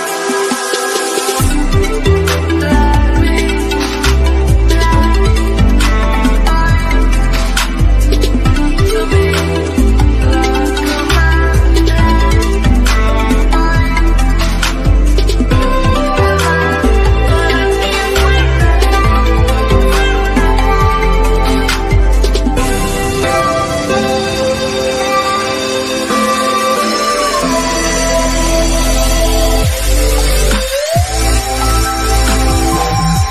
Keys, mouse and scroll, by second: 9.4 click, 9.9 typing, 12.1-12.9 typing, 15.8 click, 18.8-19.1 scroll down 1, 19.6-21.1 middle drag, 21.1 scroll up 1, 23.8 middle click, 25.0 middle click, 25.6-26.7 scroll up 1, 27.4 click, 28.7-29.3 scroll up 1, 30.0 click, 30.8 scroll up 1, 31.8 click.